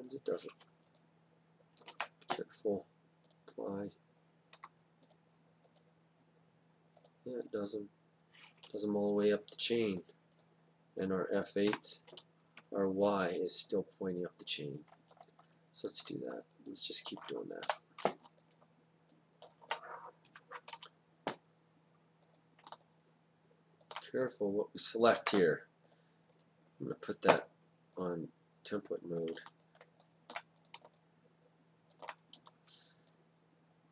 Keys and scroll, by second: 1.9 ctrl+z, 4.5 Down, 11.7 F8, 17.6 4, 20.3 F8, 25.1 ctrl+z, 32.4 w.